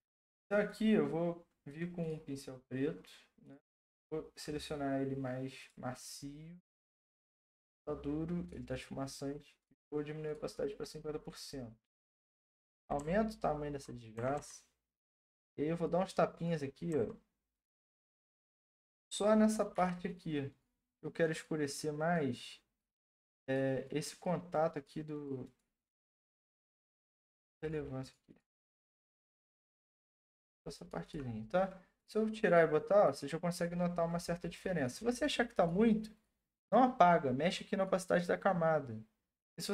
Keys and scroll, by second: 13.0-14.3 typing, 16.4-17.2 typing, 18.5-19.7 typing.